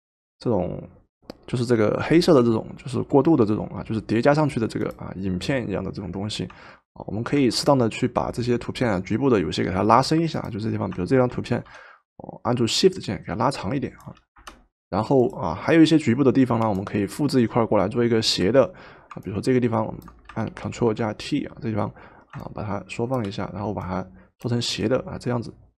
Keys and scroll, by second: 11.5 ctrl+t, 14.4 Return, 20.8 ctrl+t.